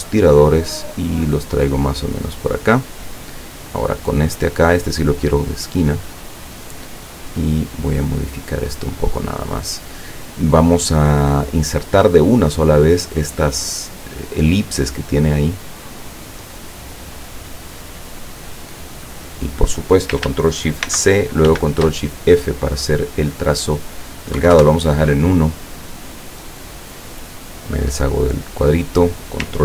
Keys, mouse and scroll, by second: 0.1-3.1 drag, 3.8 click, 6.2 click, 7.2-8.6 drag, 12.0 click, 16.1-19.8 drag, 20.9 ctrl+shift+c, 22.6 click, 24.4 KP_1, 24.6 KP_Enter, 27.3 click, 28.6 click.